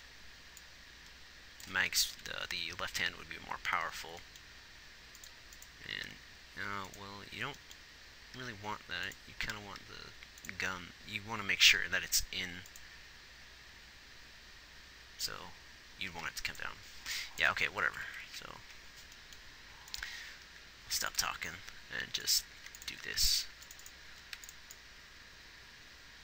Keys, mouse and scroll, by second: 2.5 ctrl+z, 6.3 g, 8.7 g, 12.1 g, 16.5 g, 18.1-18.6 Right, 21.2 x, 22.9 x, 23.9 g.